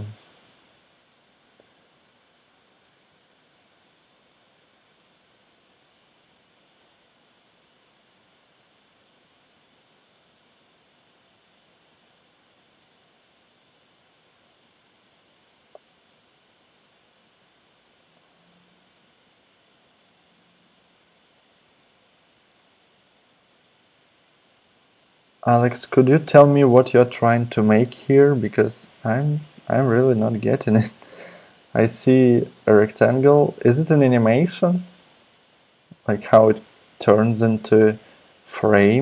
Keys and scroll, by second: 3.3 super+Tab.